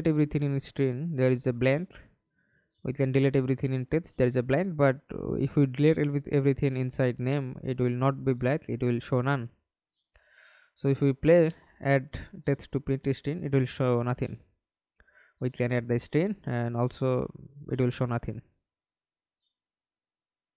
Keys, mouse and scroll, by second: 0.3 BackSpace, 0.5 Return, 8.0 double click, 8.4 double click, 8.9 middle click, 9.6 F11, 10.0 alt+p, 11.3 Escape, 11.6 middle click, 12.3 F11, 17.2 double click, 19.9 middle click.